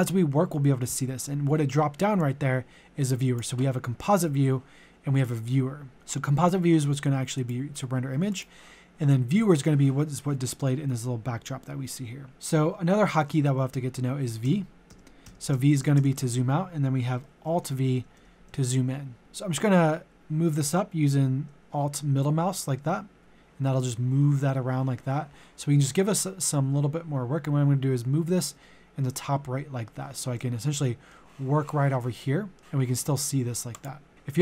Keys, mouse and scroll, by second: 14.4-16.2 typing, 17.5-19.2 typing, 21.6-28.6 alt+middle drag, 30.3-31.6 middle drag, 33.7 click.